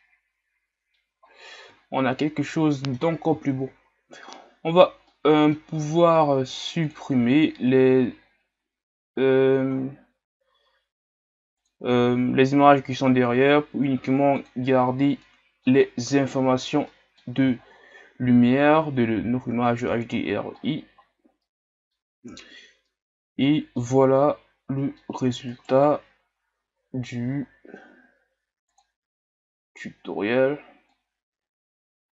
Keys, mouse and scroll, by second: 1.2 scroll up 1, 1.9 shift+scroll down 2, 2.3-3.6 middle drag, 3.6-4.8 scroll up 5, 4.8-5.1 scroll down 2, 5.1-14.5 middle drag, 14.5 click, 15.3-17.5 middle drag, 17.5-18.1 shift+scroll up 2, 18.9-20.3 middle drag, 20.3-21.2 scroll down 7, 21.5-22.1 middle drag, 22.1 scroll up 4, 23.0-24.4 middle drag, 24.4 scroll down 1, 24.8-25.7 middle drag, 25.7-27.7 right drag, 28.9 click, 31.8-32.1 drag.